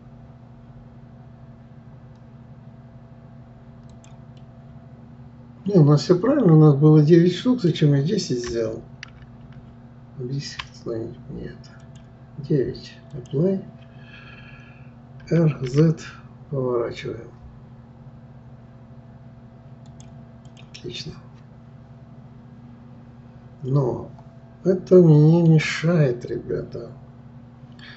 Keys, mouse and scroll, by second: 4.4-7.4 middle drag, 9.1 ctrl+z, 9.5 ctrl+z, 11.8 click, 13.1 click, 15.2 r, 20.5 click, 20.9-24.0 middle drag.